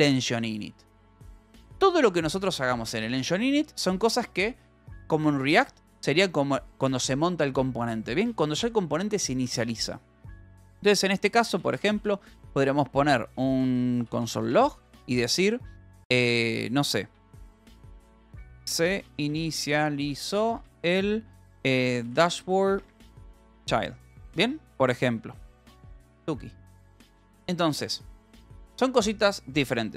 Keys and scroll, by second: 0.8 ctrl+g, 1.6 ctrl+s, 2.2 a, 2.5 space, 11.3-15.0 typing, 17.2-22.9 typing, 23.9 Return, 26.4 ctrl+s, 27.6-29.3 typing.